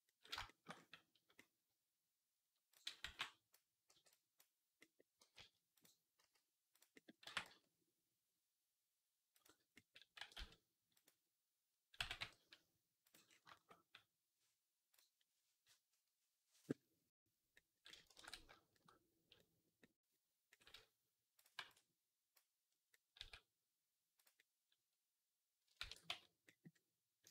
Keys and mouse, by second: 0.0 shift+middle click, 1.2 click, 1.5 click, 2.5 click, 2.9 b, 3.8 b, 4.7-6.8 drag, 5.0 g, 6.0 s, 7.1 r, 10.0-13.4 middle drag, 10.0 r, 11.8 g, 18.0 ctrl+s, 20.3 click, 21.4 b, 22.7-24.0 drag, 23.0 s, 25.6 ctrl+a.